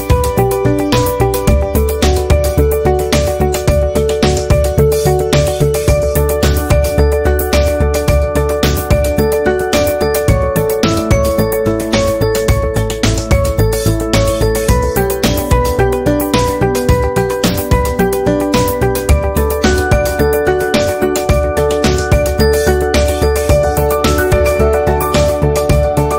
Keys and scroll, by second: 0.1 v, 0.9 c, 7.0 v, 8.6 Delete.